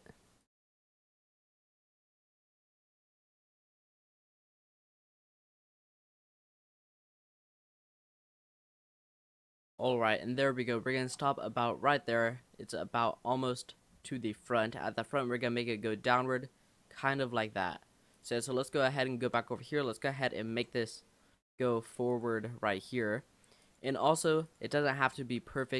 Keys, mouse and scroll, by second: 0.0-6.0 typing, 1.0 middle click, 1.3 click, 1.4 shift+middle click, 3.2 shift+middle click, 4.7 shift+middle click, 6.2 scroll down 4, 6.4-6.9 scroll up 3, 6.6 shift+middle click, 6.9 shift+middle click, 7.0-9.4 typing, 8.2 shift+middle click, 9.8 click, 10.2-10.8 scroll down 5, 10.8-12.7 shift+middle drag, 12.7 click, 13.2 middle click, 13.4-13.7 scroll down 1, 13.7-16.7 middle drag, 18.1 click, 18.6 scroll up 3, 19.1 shift+middle click, 19.3-19.6 shift+scroll up 3, 20.0 click, 20.5 l, 21.4 r, 22.6 g, 23.9 r, 25.2 g.